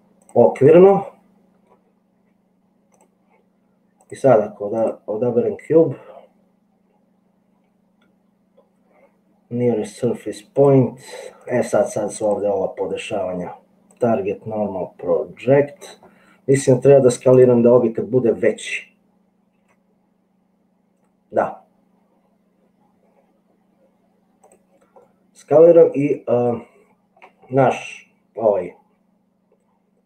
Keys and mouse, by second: 0.9 middle click, 2.3 g, 4.0 click, 10.6 click, 12.3-14.2 drag, 19.7 s, 25.1-27.3 middle drag.